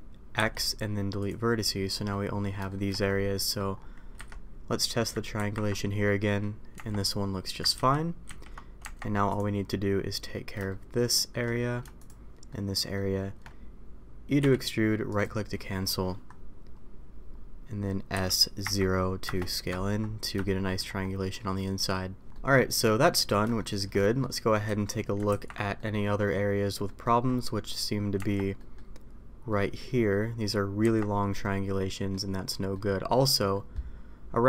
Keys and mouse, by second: 0.3 x, 1.9 middle click, 2.6 middle click, 3.3 middle click, 4.1 a, 5.4 ctrl+t, 6.0 middle click, 6.7 Tab, 8.0 ctrl+z, 8.8 Tab, 10.6 shift+middle drag, 11.1 shift+middle drag, 12.4-12.9 shift+middle drag, 18.1 s, 20.4-20.7 middle drag, 22.3 middle click, 23.0 middle click, 23.5 shift+middle drag, 24.0 middle click, 24.6 a, 25.3 ctrl+t, 25.7-26.1 middle drag, 26.8 middle drag, 28.1 Tab, 28.5 middle click, 29.5 middle drag, 30.8 Tab, 31.4-32.1 middle drag, 32.7 middle click, 33.5 middle click.